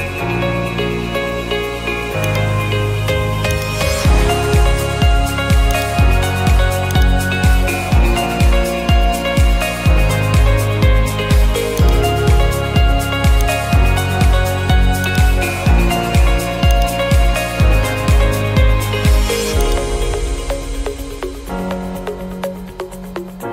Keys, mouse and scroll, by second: 2.4-4.7 drag, 5.8-8.2 drag, 11.9-13.1 drag, 13.5-14.6 drag, 15.2-16.3 drag, 16.9-20.9 drag, 21.6-22.7 middle drag.